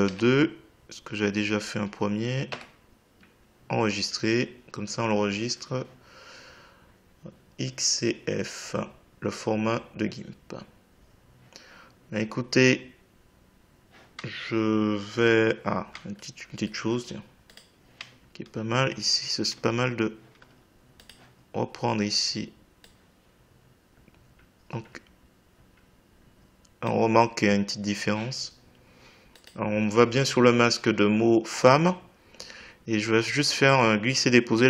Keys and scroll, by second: 2.5 Return.